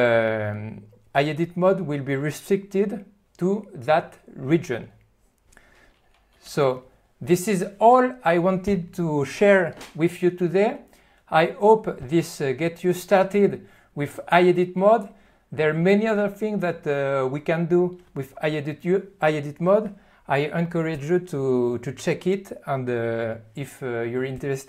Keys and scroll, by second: 6.5 alt+q.